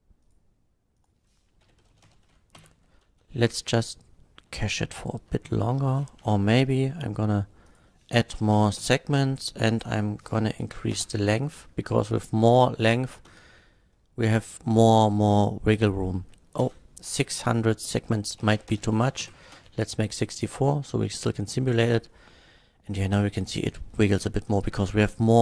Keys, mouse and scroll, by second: 0.2 click, 1.0 click, 1.7 KP_5, 1.9 KP_0, 2.0 KP_0, 2.1 Return, 2.6 shift+Left, 3.0 space, 4.8-5.2 shift+middle drag, 5.7 space, 6.2 shift+Left, 7.7 click, 8.4 KP_6, 8.5 KP_4, 8.7 Return, 8.7 KP_4, 9.7 click, 10.7 KP_8, 10.9 Return, 11.1 KP_8, 11.6 middle click, 11.6 scroll up 1, 12.1 click, 12.3 middle click, 12.3 scroll up 1, 12.9 middle click, 12.9 scroll up 1, 13.3 space, 16.7 space, 17.4 click, 18.4 KP_6, 18.5 KP_4, 18.7 Return, 19.2 shift+Left, 19.5 space.